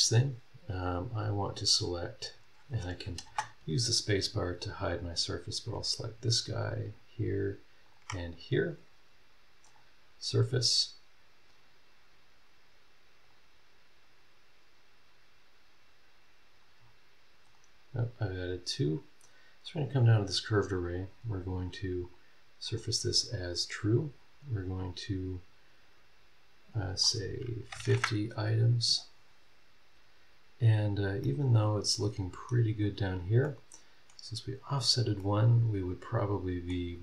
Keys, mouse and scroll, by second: 2.8 click, 3.2 space, 3.9 scroll up 2, 5.7 click, 6.7 ctrl+click, 7.8 ctrl+click, 9.6 click, 13.2 click, 16.7 scroll down 1, 17.4 right click, 18.7 click, 19.6 click, 21.3 click, 22.0 click, 22.6 click, 26.7 click, 27.6 KP_5, 27.7 KP_0, 27.9 KP_Enter, 31.2 click, 31.3 right click, 32.7-33.3 scroll up 3, 33.4 middle click, 33.5 right click, 34.2 scroll down 1, 34.8 scroll up 1, 35.2 middle click, 35.3-36.8 right drag, 36.9-37.0 scroll down 3.